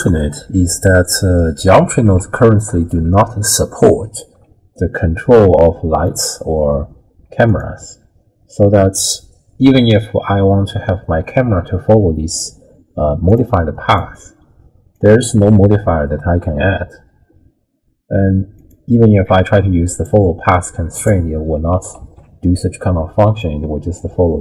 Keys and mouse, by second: 2.2-2.9 d, 2.9-4.2 drag, 4.1 d, 4.2 d, 4.5 d, 6.0 click, 7.5 click, 13.3 click, 13.9 click, 14.9 click, 18.6 click, 19.9 click, 22.0 alt+g, 23.4-24.4 drag.